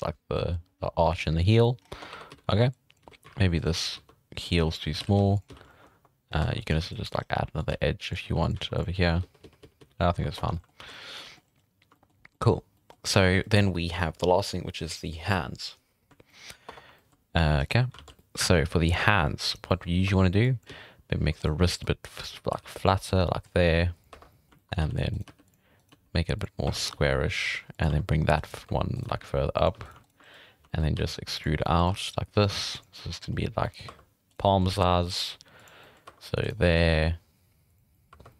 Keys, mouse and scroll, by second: 0.9-1.2 scroll down 7, 1.2 middle drag, 1.8-2.1 scroll up 2, 1.9 Tab, 2.1-5.5 typing, 2.5 alt+a, 2.7 click, 5.6 scroll down 1, 5.7 shift+middle click, 6.2 scroll down 1, 6.4 ctrl+r, 7.2 scroll up 1, 7.3 s, 7.7 g, 8.2 r, 8.6 s, 9.0 scroll down 3, 9.2 ctrl+z, 9.4 ctrl+z, 9.6 ctrl+z, 9.8 ctrl+z, 10.0 ctrl+z, 10.2 scroll down 3, 10.4 Tab, 10.5 middle drag, 10.8 alt+a, 10.9 middle drag, 11.1 scroll down 1, 11.4 scroll up 1, 11.9 shift+middle drag, 12.2 scroll down 2, 12.3 middle drag, 12.5 scroll up 1, 12.7-13.3 shift+middle drag, 16.0 scroll down 1, 16.3 shift+middle drag, 16.5 scroll up 1, 16.7 Tab, 17.0-17.6 shift+middle drag, 17.6 scroll up 2, 18.0 alt+a, 18.2-19.2 middle drag, 19.7 shift+middle drag, 19.8 scroll up 3, 20.1 1, 20.4 drag, 20.7 z, 21.2 s, 21.8 click, 22.3 z, 22.5 g, 23.1 middle click, 23.6 g, 24.1 1, 24.3 shift+middle click, 24.7-25.1 scroll up 3, 24.8 alt+a, 25.1 right click, 25.3-29.7 typing, 25.8 right click, 26.8 right click, 28.4 scroll up 4, 29.0 right click, 29.8 right drag, 30.0 shift+right click, 30.5 scroll down 4, 30.7 shift+middle drag, 31.0 e, 31.6 r, 31.9 g, 33.0-33.6 middle drag, 33.6 scroll up 1, 33.6 middle click, 33.9 2, 34.3 right click, 34.5 middle click, 34.7 g, 35.8 middle click, 36.1 2, 36.4 right click, 36.6 middle click, 36.9 g, 37.9 middle click, 38.1 2, 38.1 scroll down 3, 38.3 middle click.